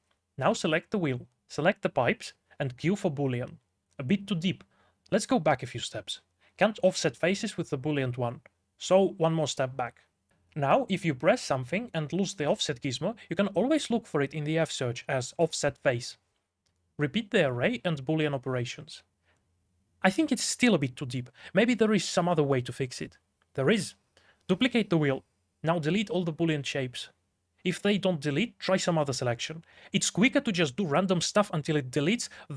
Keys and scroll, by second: 3.2 q, 4.8-6.1 typing, 6.3 ctrl+z, 7.1 ctrl+z, 7.8 3, 8.7 d, 9.4 Escape, 9.9 ctrl+z, 10.8-12.7 typing, 13.9 Escape, 14.0-15.4 typing, 17.1-18.5 typing, 19.0 Escape, 19.6 q, 21.7 2, 22.0 x, 22.6 shift+d, 23.8 shift+w, 24.4 3, 24.8 x, 25.9 x, 26.9 x, 28.5 x, 30.0 x, 30.7 x, 31.3 ctrl+z, 31.8 ctrl+z.